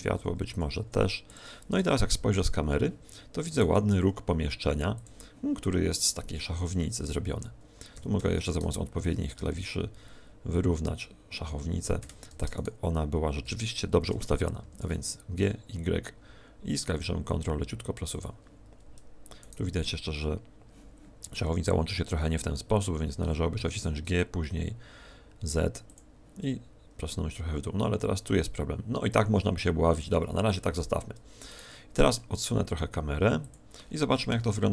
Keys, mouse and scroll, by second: 1.3 g, 1.7 KP_0, 3.5 right click, 3.9 g, 4.9 click, 7.9 g, 12.5 shift+right click, 18.1 ctrl+click, 19.3 right click, 25.9 ctrl+click, 31.4 right click.